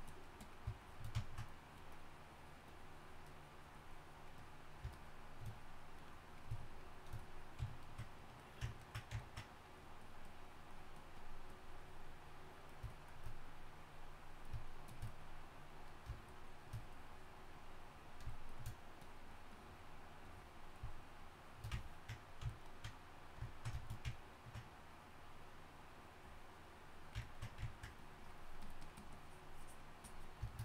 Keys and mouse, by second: 22.1-27.7 drag, 30.5 drag.